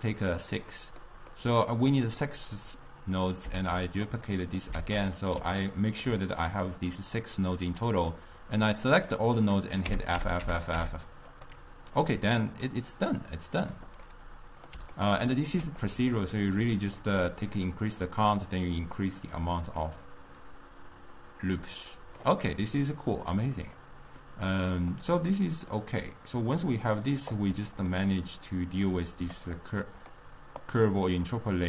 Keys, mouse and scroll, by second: 0.8-3.3 middle drag, 3.3 click, 3.7 shift+d, 4.4-4.8 middle drag, 4.8 shift+d, 5.8-8.7 ctrl+middle drag, 8.7-10.0 drag, 10.0 f, 10.3 f, 10.5 f, 10.8 f, 11.4 click, 12.1-16.8 middle drag, 16.8 click, 17.4-20.5 drag, 22.7-28.7 middle drag, 28.7 drag, 29.2-30.4 drag, 30.4-30.8 middle drag, 30.8 click.